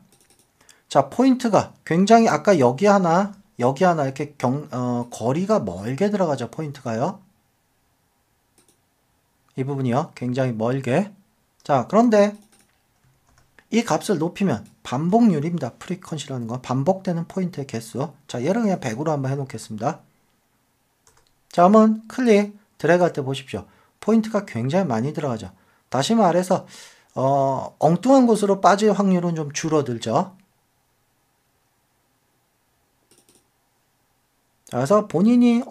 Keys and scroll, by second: 3.2 super+d, 13.3 super+d, 21.1 Tab.